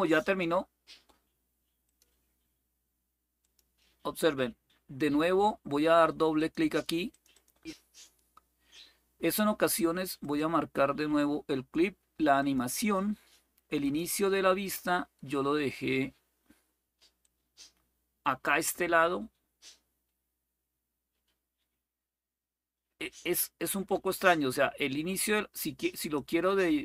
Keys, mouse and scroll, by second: 0.0 click, 1.6 click, 3.2 click, 6.1 click, 6.9 click, 9.9 click, 12.1 click, 13.6 click, 17.0-25.9 drag, 26.6-26.8 drag.